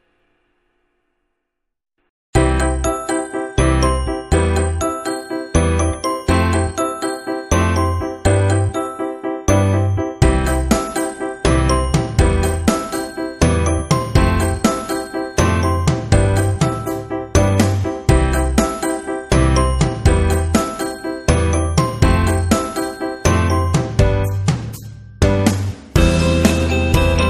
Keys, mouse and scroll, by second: 1.3 click, 3.9 click, 6.1 click, 6.9 click, 8.7 click, 9.2 click, 10.6 click, 13.2 click, 14.1 click, 17.1 click, 18.4 click, 24.4 click, 25.7 click.